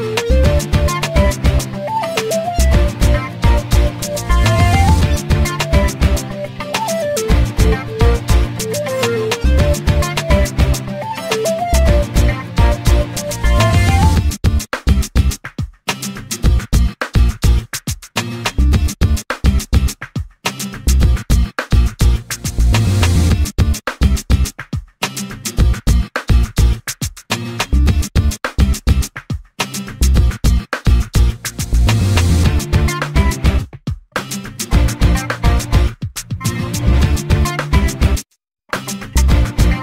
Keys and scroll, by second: 2.4 2, 3.5 Return, 10.6 l, 16.2 3, 16.6 0, 18.0 BackSpace, 18.8 4, 20.6 Return, 29.0 e.